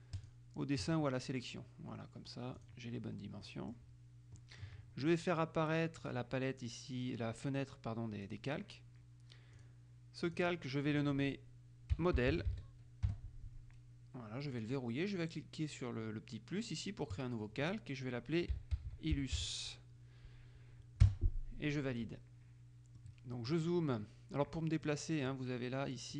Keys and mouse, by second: 0.3 click, 2.7 click, 3.6 middle click, 4.5 middle click, 6.2 click, 8.4 click, 9.7 click, 10.4 click, 11.9-13.0 typing, 13.2 Return, 14.6 click, 17.2 click, 18.5-20.1 typing, 21.2 Return, 23.2-24.2 middle drag, 25.0 click.